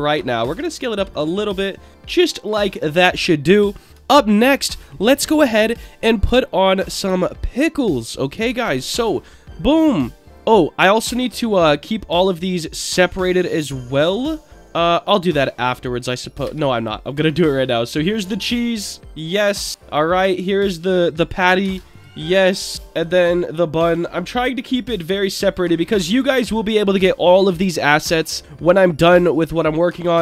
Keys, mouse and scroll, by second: 0.5 s, 1.1 click, 1.4-3.3 middle drag, 4.1-4.5 shift+middle drag, 6.5 scroll up 2, 7.2-7.7 shift+middle drag, 8.4 shift+a, 10.5-10.9 scroll down 3, 10.9 middle drag, 11.5 click, 11.8-12.2 scroll down 1, 12.2 click, 14.3-15.1 middle drag, 15.1-16.0 scroll up 1, 16.0 scroll up 1, 16.4 shift+d, 16.7 click, 17.0-17.6 scroll down 1, 17.6-18.8 drag, 19.1 click, 19.8-20.4 scroll down 1, 20.4 click, 21.6 shift+d, 21.9 click, 22.2-22.7 scroll down 2, 23.0 click, 24.6 click, 25.6 middle click, 26.1-27.4 scroll down 2, 29.3-29.9 scroll up 1, 29.9 scroll up 2, 30.1-30.2 shift+middle drag.